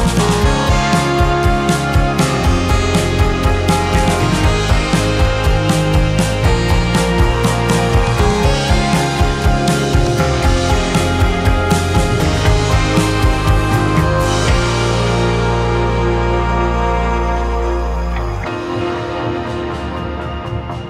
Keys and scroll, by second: 0.0 space, 2.5 space, 8.4 space, 11.2 2, 18.8 ctrl+c, 18.9 ctrl+v.